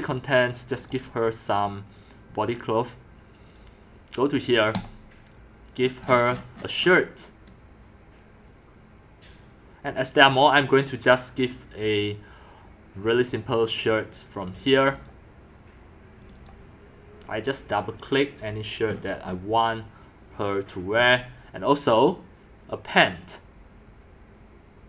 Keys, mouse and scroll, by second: 0.8 click, 2.0-4.6 drag, 5.8-6.6 scroll, 6.6-7.0 scroll down 22, 7.0-7.7 middle drag, 7.0-7.5 scroll, 10.1 scroll down 10, 11.7 scroll down 1, 15.0 click, 16.5 click, 18.9-20.5 scroll down 12, 20.5 drag, 21.1-21.5 scroll up 1, 21.7-23.3 drag.